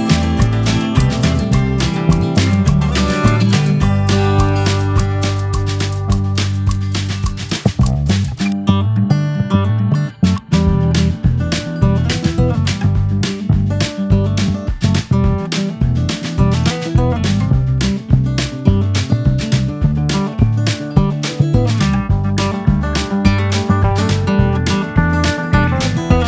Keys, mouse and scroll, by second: 0.3-0.7 scroll down 1, 1.2 scroll down 5, 1.5 click, 2.8 KP_Decimal, 3.0-3.6 scroll up 5, 3.6 click, 4.2-4.8 drag, 4.8-5.8 right drag, 6.1 click, 6.5 ctrl+s, 7.0-8.2 drag, 8.7-11.0 drag, 9.9 ctrl+s, 12.8-13.8 drag, 14.2 ctrl+a, 16.8 scroll up 5, 18.4 click, 18.8 ctrl+s, 19.5-19.8 scroll down 4, 19.8 scroll up 3, 20.0 KP_0, 21.4 middle click, 21.5-22.0 scroll up 4, 21.9 drag, 23.4 drag, 25.3-25.9 drag.